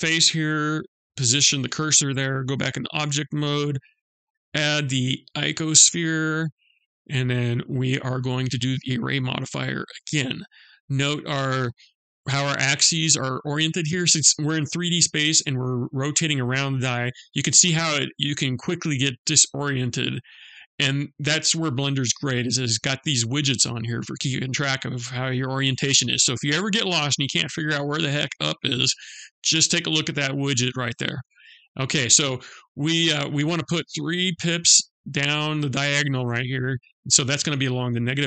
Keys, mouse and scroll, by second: 2.1 Tab, 3.0 shift+a, 9.4 click.